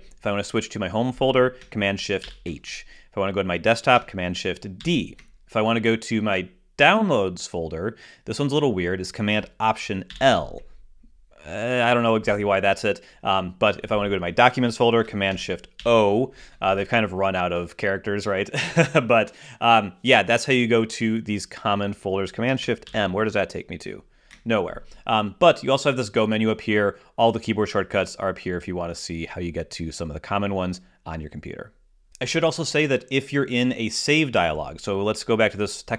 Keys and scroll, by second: 2.6 shift+super+h, 5.1 shift+super+d, 10.4 alt+super+l, 16.1 shift+super+o, 23.2 shift+super+m.